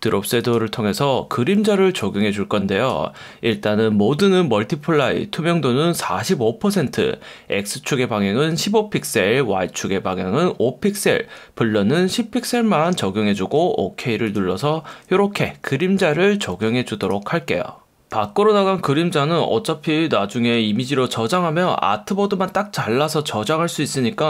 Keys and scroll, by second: 1.5 F1, 18.1 F1, 21.0 F1.